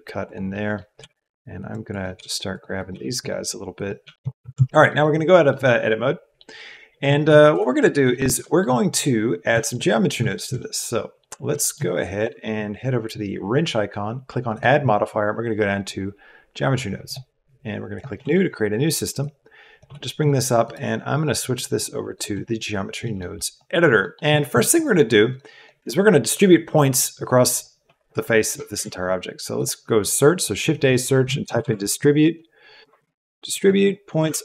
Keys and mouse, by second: 0.5 click, 0.9 g, 1.9 click, 2.1 g, 2.7 click, 2.9 g, 4.0 g, 4.4 Tab, 4.8-11.5 middle drag, 11.6 shift+click, 14.7-17.1 drag, 19.1 click, 20.8-22.2 drag, 23.1 click, 24.1 click, 25.3 click, 28.7 shift+a.